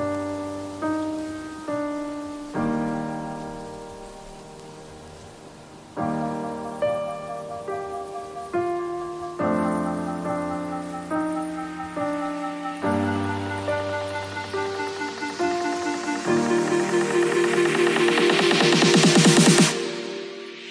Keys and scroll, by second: 0.8 space, 5.9 b, 11.2 ], 14.7 v, 18.7 b.